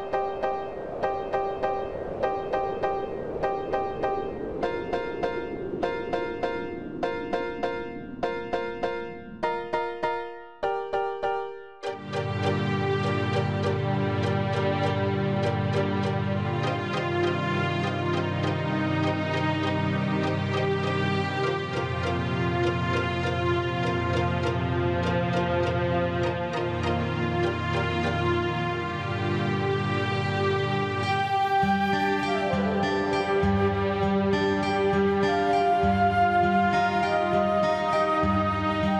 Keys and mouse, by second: 0.9 click, 2.4 click, 3.9 click, 5.1-5.6 KP_Subtract, 6.2 click, 7.3 click, 8.5 KP_Add, 9.3 click, 10.2 click, 12.1 click, 13.6-13.9 KP_Subtract, 14.6 click, 15.7 click, 17.7 click, 19.3 click, 20.8 KP_Add, 21.8 click, 22.5 click, 23.6 click, 24.4 click, 25.4 click, 26.5 click, 27.4 click, 28.2-30.2 drag, 31.3 click, 32.7 click, 34.0 KP_Add, 35.1 click, 37.2 click, 38.3 KP_Subtract.